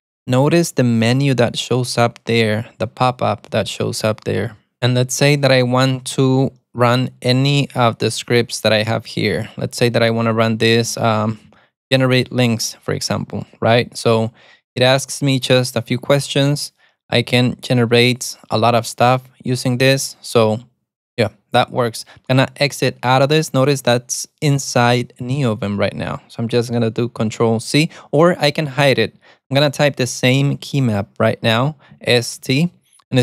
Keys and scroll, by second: 11.1 Down, 11.3 Up, 11.5 Down, 12.6 Return, 32.5 alt+super+a, 32.6 t.